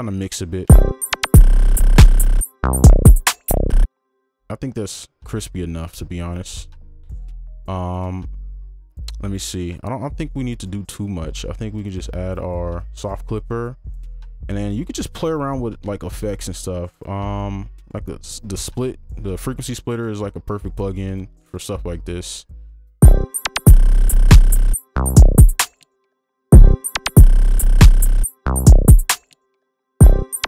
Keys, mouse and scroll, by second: 13.7-14.2 scroll down 1.